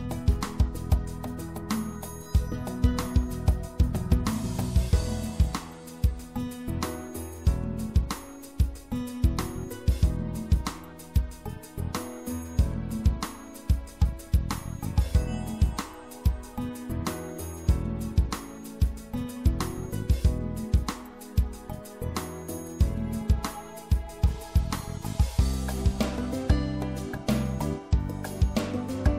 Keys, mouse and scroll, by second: 4.5 a, 5.0 a, 6.8-8.6 drag, 10.7-12.6 drag, 20.4 KP_3, 24.6-28.8 middle drag.